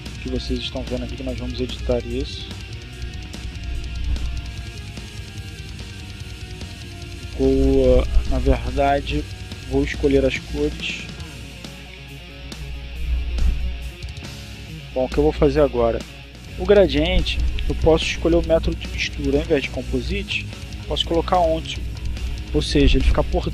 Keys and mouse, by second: 0.5-3.7 drag, 3.9-5.5 drag, 10.0 click, 13.8 click, 18.2 click, 19.2 click, 20.4 click.